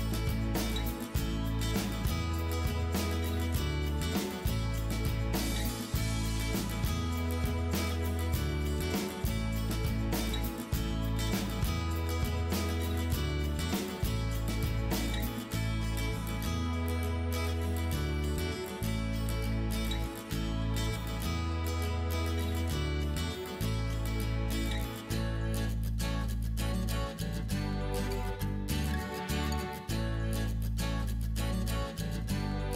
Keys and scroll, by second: 21.2-23.4 typing, 31.2-32.4 typing.